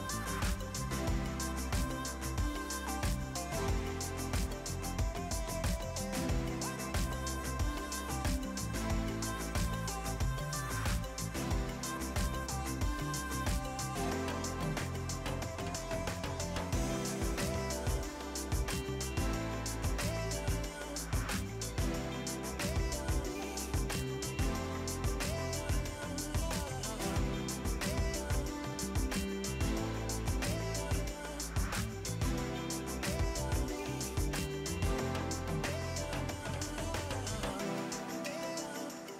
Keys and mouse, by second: 3.2 click, 4.7 c, 4.9 click, 6.1 click, 6.9 right click, 7.9 click, 9.5 click, 9.9 KP_1, 10.1 Return, 17.9 click, 24.3 click, 24.8 a, 25.0 click.